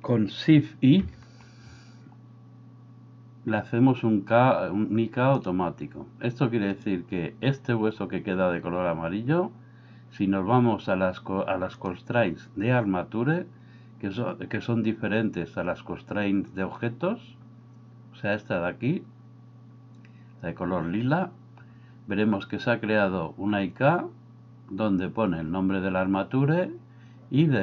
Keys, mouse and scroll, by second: 1.0 shift+i.